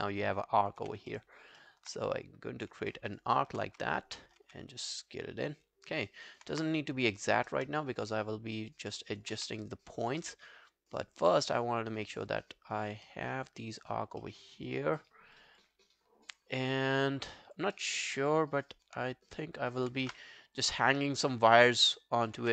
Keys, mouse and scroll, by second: 0.8 w, 1.1 alt+middle click, 1.4 alt+scroll up 2, 1.6 alt+middle click, 2.9 alt+middle click, 3.1 alt+right click, 3.4 alt+middle click, 3.7 w, 6.1 alt+middle click, 6.3 alt+right click, 6.6 space, 7.6 space, 8.2 alt+click, 8.9 alt+middle click, 9.1 alt+right click, 9.4 w, 11.2 alt+click, 11.5 alt+right click, 12.1 alt+right click, 12.3 alt+click, 13.1 alt+middle click, 13.4 alt+right click, 13.7 alt+scroll down 1, 13.9 alt+click, 14.2 alt+middle click, 14.5 alt+right click, 14.7 alt+click, 15.4 alt+click, 16.6 alt+click, 17.1 alt+scroll down 1, 17.3 alt+click, 17.8 alt+scroll up 4, 18.0 alt+click, 19.6 alt+click, 20.1 r, 21.6 alt+click, 22.4 w.